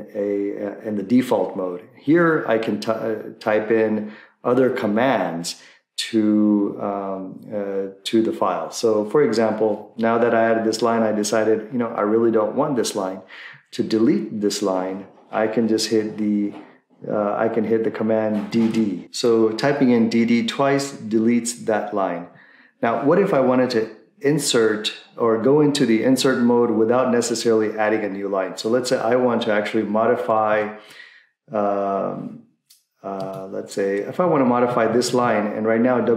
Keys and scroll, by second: 18.5 d, 18.6 d, 34.2 Left, 34.7 Right, 34.9 Right, 35.1-36.0 Right.